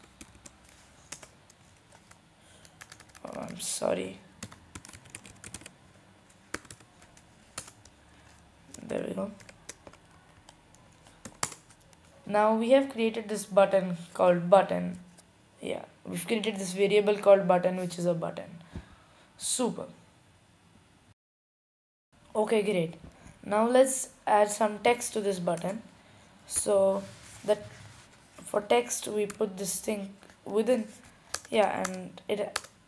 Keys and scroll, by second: 0.5 typing, 4.5-7.2 typing, 10.2-11.0 typing.